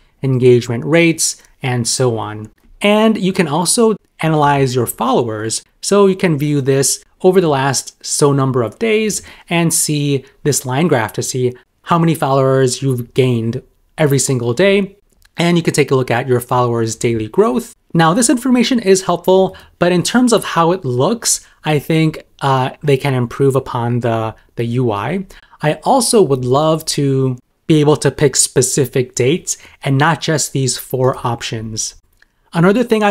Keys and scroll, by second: 16.6 super+m.